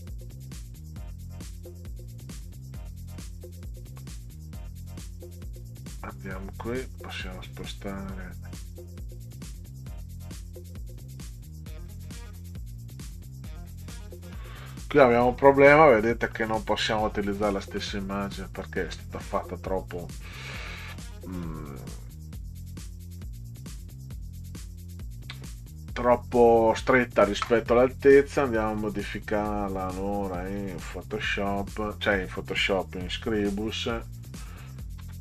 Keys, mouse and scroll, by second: 5.6 click, 6.3-8.0 drag, 10.4 click, 11.6 right click, 13.8 click, 15.4-15.8 scroll down 2, 16.0 middle click, 16.6 scroll down 2, 17.0-17.3 scroll up 2, 17.4 middle click, 28.6 click, 30.6 click, 35.0 ctrl+x.